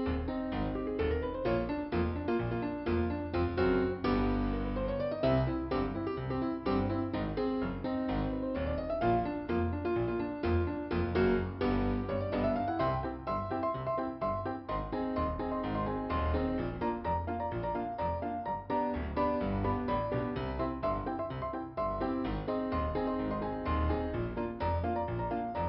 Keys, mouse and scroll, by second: 2.2-2.9 scroll down 2, 3.7-4.7 scroll up 2, 4.9 click, 6.2 click, 6.3 click, 6.4 click, 6.5 click, 6.7 scroll down 2, 8.9 middle click, 13.1-13.6 scroll up 2, 15.0 click, 15.3 double click, 15.4 double click, 15.6 double click, 16.0 double click, 16.2 double click, 16.3 double click, 16.7 double click, 17.5 scroll down 2, 18.7 click, 19.9 middle click, 20.7 scroll down 2, 21.7 click, 23.5 click, 24.1 scroll up 2, 25.0 click, 25.1 scroll up 1, 25.1 click.